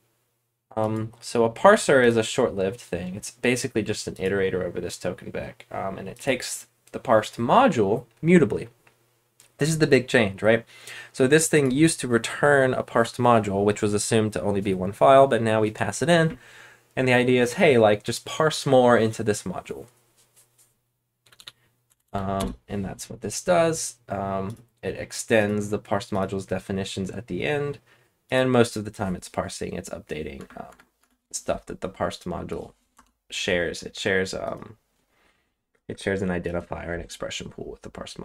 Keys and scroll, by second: 21.2-22.3 typing, 30.3 BackSpace, 30.6 BackSpace, 30.9 BackSpace, 32.9 Return.